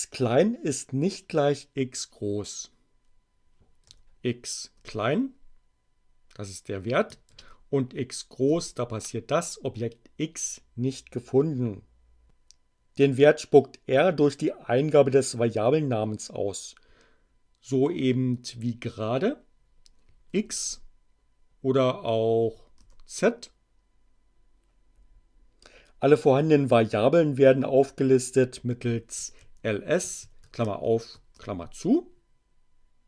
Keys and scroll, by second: 3.8 x, 4.7 Return, 7.3 shift+x, 8.5 Return, 20.3 x, 20.6 Return, 22.3 z, 22.7 Return, 29.1 l, 29.4 s, 30.2 shift+8, 30.7 shift+9, 31.3 shift+Return.